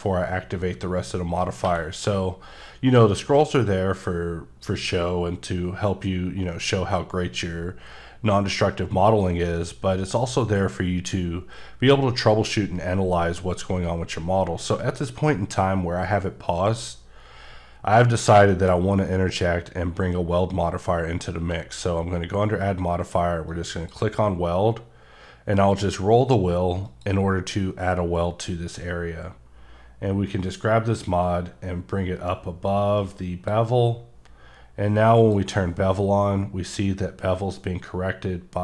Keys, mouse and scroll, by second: 1.6 q, 4.7 click, 5.5-5.9 scroll, 5.9-6.6 scroll up 1, 6.6-7.9 scroll up 1, 9.3 scroll down 1, 10.6 scroll up 1, 14.8 right click, 18.1 scroll up 4, 18.5 shift+middle click, 18.7-19.9 scroll up 2, 21.4 q, 23.4 click, 24.5-25.3 scroll up 2, 26.8 click, 30.3 click, 35.3 click.